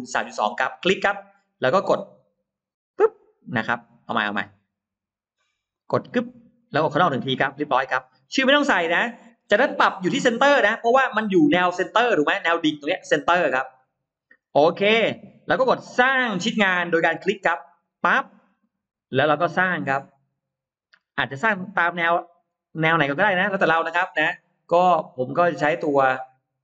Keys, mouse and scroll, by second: 0.5 click, 2.4 click, 4.3 click, 5.5 click, 6.4 click, 8.1 click, 17.7 click, 18.4 scroll up 1, 18.6 middle click, 19.1 scroll down 2, 19.5-20.2 scroll up 2, 22.7 middle click, 23.2-23.9 scroll down 4, 23.3 middle click, 24.2 middle click, 24.2 scroll up 2, 25.3 scroll up 2.